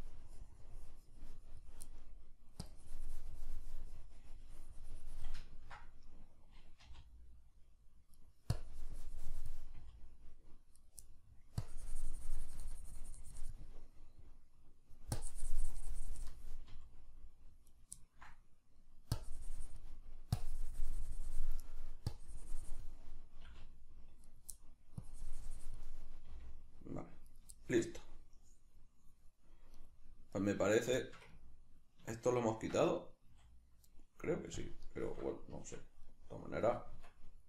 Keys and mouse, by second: 1.9 middle click, 2.6-5.4 drag, 5.4-8.3 ctrl+middle drag, 6.8 r, 8.3 right click, 8.5-10.8 drag, 9.7 r, 10.8 right click, 11.0 middle click, 11.6-13.7 drag, 13.7-15.2 middle drag, 15.2-17.8 drag, 16.7 r, 17.8 right click, 18.0-19.2 ctrl+middle drag, 19.2 click, 20.0 middle click, 20.4-21.6 drag, 21.6 middle click, 22.1 click, 23.0-24.4 middle drag, 23.4 r, 24.4 right click, 24.6 middle click, 25.0 click, 25.8-27.4 middle drag, 26.3 r, 27.4 right click, 27.6-29.8 shift+middle drag, 29.8 right click, 30.4 right click, 31.0-34.6 shift+middle drag, 32.6 Tab, 33.3 a, 34.6 click, 35.6 Tab, 36.1 right click, 36.7 Tab.